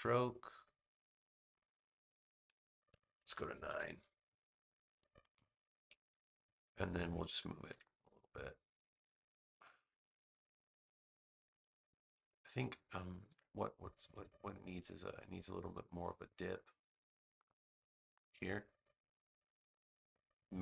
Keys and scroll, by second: 3.5 9, 3.7 Return, 7.6 v, 13.2 a.